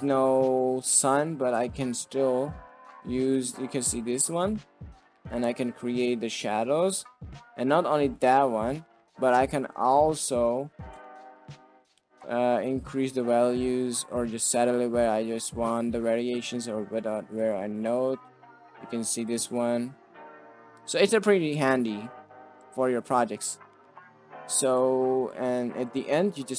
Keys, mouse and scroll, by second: 0.7 middle click, 1.4 middle click, 1.8 middle click, 2.6-8.2 drag, 9.4 shift+middle drag, 9.9 middle drag, 10.0 click, 11.4 middle click, 12.5-16.8 shift+drag, 17.5-19.2 shift+drag, 19.9 shift+click, 20.8 shift+right click, 22.5 click, 23.4 click, 23.9 click, 24.5 click, 25.3 drag.